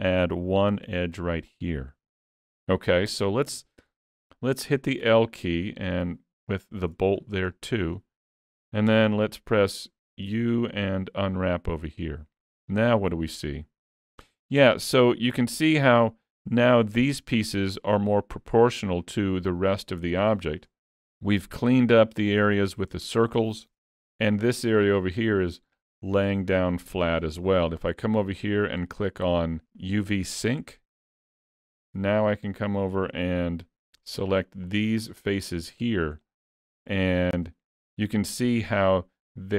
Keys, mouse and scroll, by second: 0.9 ctrl+e, 2.2 alt+a, 2.6-3.0 scroll down 4, 3.0 middle click, 6.1 l, 6.3 scroll down 2, 6.6 shift+middle click, 7.1-7.6 scroll down 5, 7.6 shift+middle click, 10.3 u, 12.9-13.6 scroll up 2, 13.6 shift+middle click, 14.7 alt+a, 16.1 scroll up 1, 16.6 shift+middle click, 16.9 shift+scroll up 1, 24.4 middle click, 30.3 click, 31.9 alt+a, 33.8 alt+click, 33.8 3, 34.7 alt+click, 36.3 middle click, 37.5 middle click.